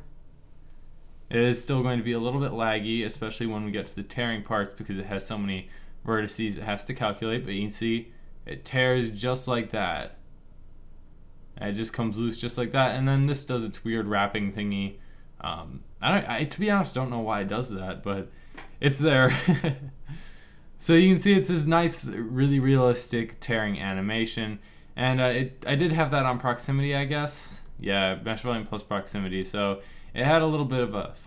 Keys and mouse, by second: 4.9 middle click, 5.6 middle click, 20.8 middle click, 26.6-27.8 drag, 30.6 middle click.